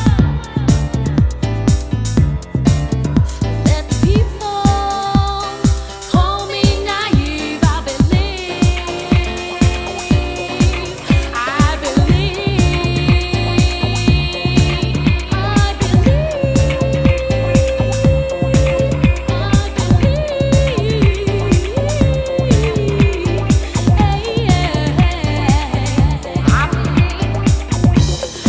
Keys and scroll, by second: 9.6 super+c, 10.2 super+v, 15.3 super+Tab.